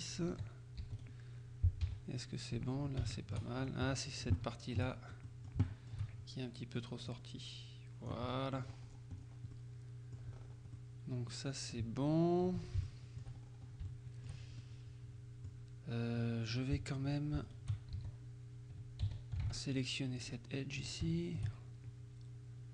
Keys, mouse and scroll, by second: 0.4 z, 1.1 right click, 1.9 g, 2.6 Escape, 3.2 shift+middle click, 3.7 shift+right click, 4.4 shift+middle click, 5.3-6.4 shift+middle drag, 7.2-8.4 drag, 8.4 scroll down 1, 8.5 scroll up 1, 8.7-9.6 scroll down 1, 9.6 middle click, 10.4-10.8 scroll up 1, 10.8 middle click, 11.9 z, 12.9 shift+middle click, 13.5-14.0 shift+scroll up 1, 14.0 shift+middle click, 14.7 shift+middle click, 16.6 shift+right click, 18.0 shift+z, 19.1 z, 19.5 ctrl+Tab, 20.2 click, 20.8 shift+right click, 21.2 shift+click.